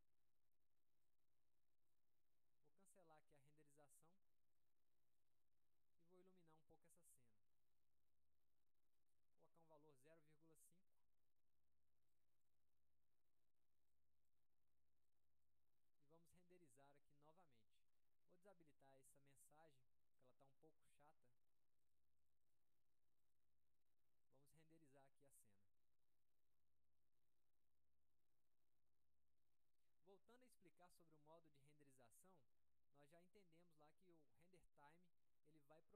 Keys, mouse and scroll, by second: 0.6-1.9 drag, 4.8 click, 6.8-7.4 drag, 12.3 click, 14.1-14.5 drag, 15.3 click, 17.3 click, 19.0 click, 20.4 click, 22.0 click, 22.4 click, 22.6 click, 23.4 click, 24.4 click.